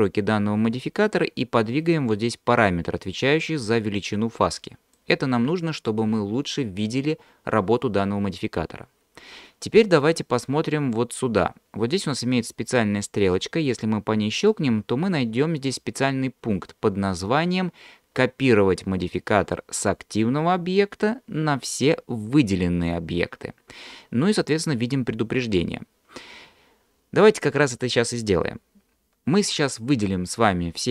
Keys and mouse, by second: 3.5-5.1 drag, 14.5-26.7 drag.